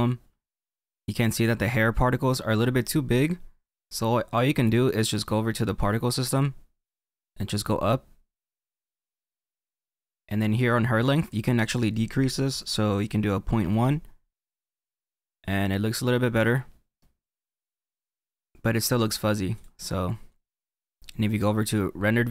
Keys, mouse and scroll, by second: 1.8-2.9 scroll up 4, 2.9-6.0 scroll down 2, 14.8-17.8 middle drag, 19.8-21.9 drag, 21.9 middle click.